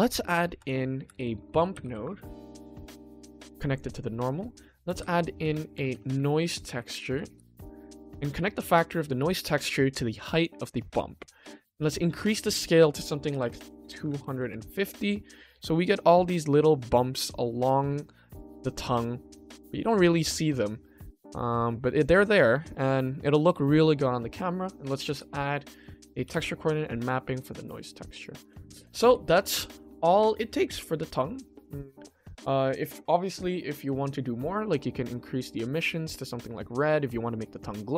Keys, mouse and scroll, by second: 0.7 ctrl+s, 1.0 shift+a, 3.1 click, 4.0 click, 4.4 shift+middle click, 4.8 shift+a, 6.5 BackSpace, 9.4-10.4 drag, 12.1-14.5 drag, 13.5 KP_0, 13.9 BackSpace, 14.0 BackSpace, 15.6 scroll up 1, 16.3-17.0 middle drag, 17.1 middle click, 20.9-21.2 middle drag, 21.2 scroll down 1, 21.9 scroll down 1, 22.4 middle click, 23.9 ctrl+s, 24.7 click, 25.8-26.1 drag, 26.2 g, 27.4 click, 27.8 shift+middle click, 29.0 ctrl+s, 30.2-32.1 drag, 34.4 click, 37.5 click.